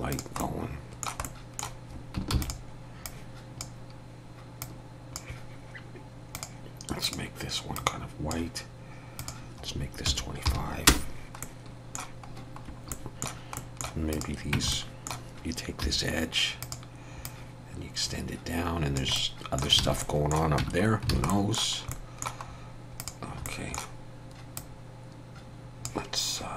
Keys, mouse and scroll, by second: 0.1 click, 0.4 middle click, 1.2 middle click, 1.3 shift+middle click, 2.4 shift+d, 3.1 click, 4.6 click, 6.3 click, 7.0 click, 9.2 click, 11.4 middle click, 12.7 scroll up 1, 12.9 middle click, 13.6 middle click, 14.1 click, 14.5 Tab, 14.7 middle click, 15.9 2, 16.6 click, 17.3 click, 19.2 middle click, 19.8 alt+a, 20.0 middle click, 20.6 Tab, 20.9 scroll down 2, 21.2 alt+a, 21.3 middle click, 21.9 middle click, 22.5-22.8 scroll up 2, 23.0 click, 23.5 middle click, 24.6 click.